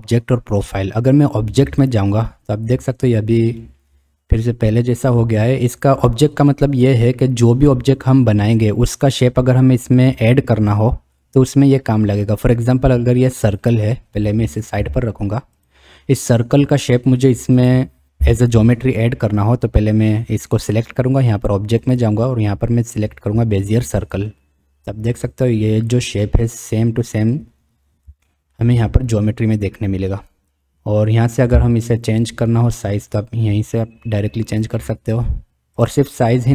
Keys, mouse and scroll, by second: 1.7 click, 3.7-5.4 drag, 13.6 click, 14.7 g, 17.6 click, 21.8-24.2 drag, 25.8 click, 28.2-28.6 shift+drag, 31.5 s.